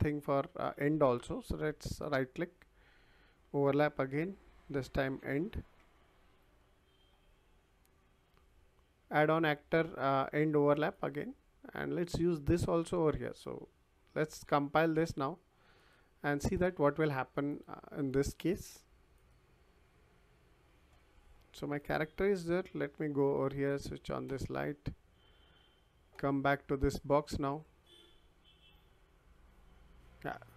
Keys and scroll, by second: 4.0 o, 4.7 v, 5.2 e, 5.8 r, 21.7 w, 26.8 w.